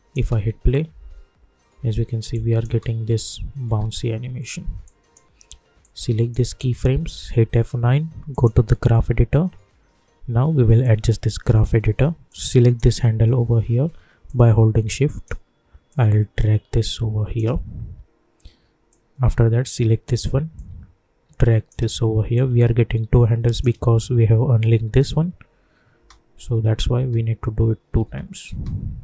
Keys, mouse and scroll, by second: 0.2 space, 2.3 click, 2.6 space, 4.8-7.2 drag, 7.2 F9, 8.3 click, 10.8-15.9 drag, 15.9-22.3 drag, 22.3-26.0 drag, 26.0 space.